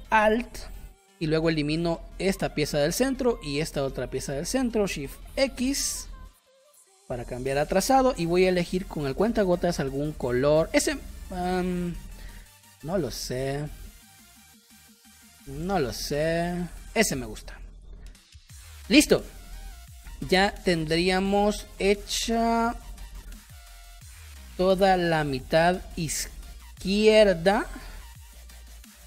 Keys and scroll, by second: 5.2 shift+x, 5.6 v, 6.5 shift+x, 11.4 Caps_Lock, 12.0 shift+x, 15.6 shift+x, 17.0 v, 17.7 space, 28.8 space.